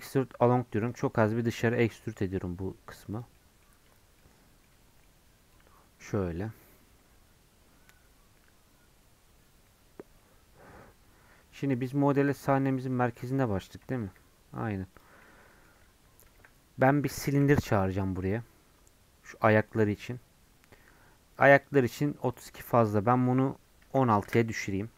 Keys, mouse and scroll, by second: 1.2-2.3 middle drag, 2.3 Tab, 3.1 click, 3.4 middle click, 3.9 Tab, 4.2 middle click, 4.7 Tab, 4.9 scroll down 1, 5.1-12.3 middle drag, 12.3 scroll down 1, 12.5-14.0 middle drag, 14.0 KP_7, 15.2-16.4 middle drag, 16.4 KP_7, 20.1 shift+a, 24.3-24.9 drag.